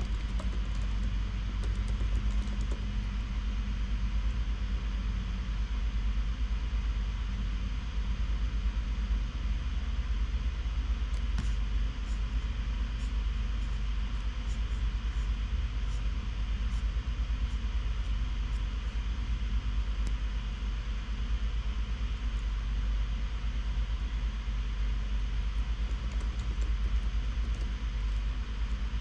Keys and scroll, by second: 0.0-3.6 typing, 21.9-22.6 typing, 24.4 shift+Left, 24.9 shift+Left, 24.9 shift+Left, 26.0-29.0 typing.